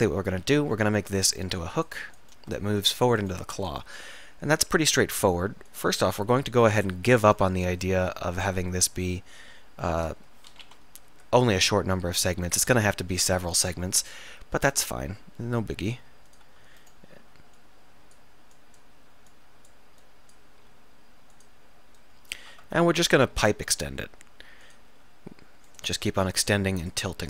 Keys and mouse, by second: 0.5-5.9 middle drag, 10.7 KP_7, 15.2 r, 16.3 click, 20.7 r, 23.4 r, 23.6 e, 25.0 r.